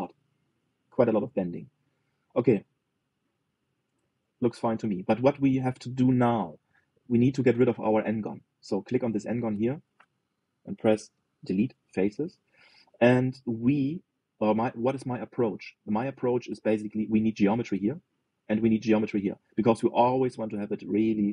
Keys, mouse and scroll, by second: 3.3 click, 3.7-6.5 middle drag, 6.5-7.1 scroll up 2, 7.1-9.5 middle drag, 9.5 click, 11.9 Delete, 13.2-13.7 scroll up 1, 13.7-21.3 middle drag.